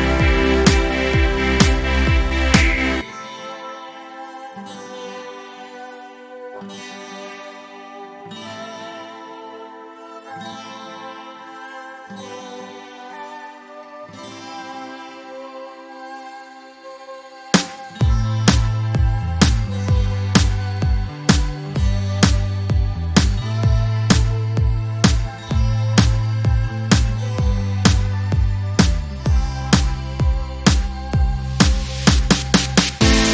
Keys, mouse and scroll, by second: 0.8-1.3 click, 1.4 ctrl+scroll up 1, 2.6-4.2 drag, 8.9-9.8 ctrl+scroll down 1, 10.4 space, 10.6 click, 11.3 ctrl+scroll up 1, 12.2-13.5 drag, 23.9-24.3 ctrl+scroll down 1, 24.6 space, 24.8 click, 25.0-25.4 space, 27.0-28.3 drag, 33.0 ctrl+scroll up 1.